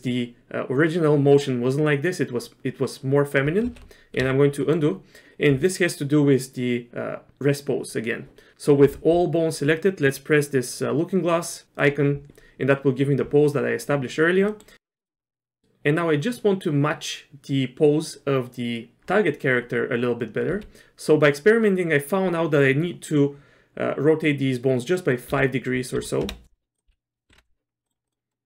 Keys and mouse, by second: 3.8 ctrl+z, 4.6 middle click, 11.8 click, 14.5 middle click, 14.8 click, 15.1 KP_1, 20.5 r, 26.9 r, 27.8 middle click, 28.1 middle click.